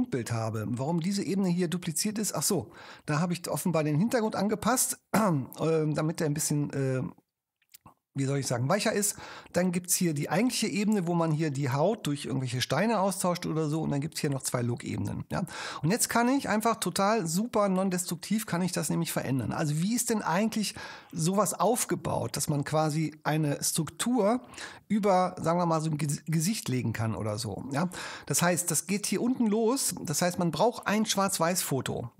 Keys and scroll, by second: 21.8 super+space.